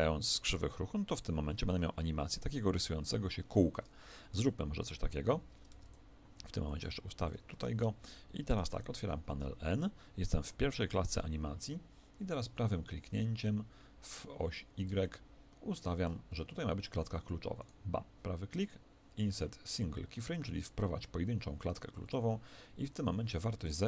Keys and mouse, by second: 4.0-6.3 middle drag, 5.7 Tab, 6.6 click, 7.5 Tab, 8.7 n, 15.0-16.8 middle drag.